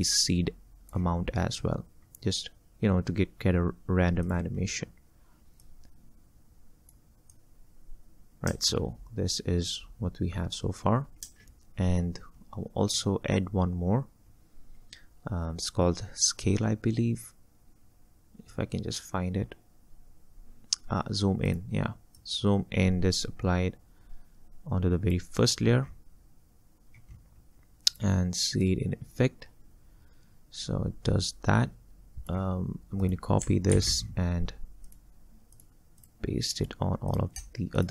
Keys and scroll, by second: 8.5 space, 11.3 space, 33.8 ctrl+c.